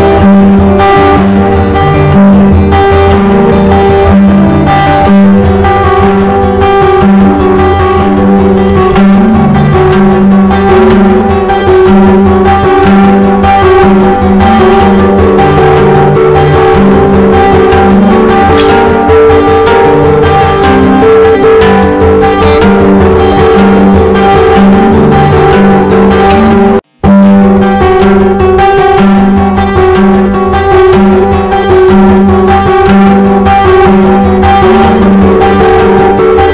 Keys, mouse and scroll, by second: 0.0-0.3 typing, 1.0-8.2 drag, 8.5-15.3 typing, 16.1-17.7 drag, 17.7 Return, 18.4-21.0 typing, 23.4-25.2 typing, 26.0-31.7 drag, 34.5 typing.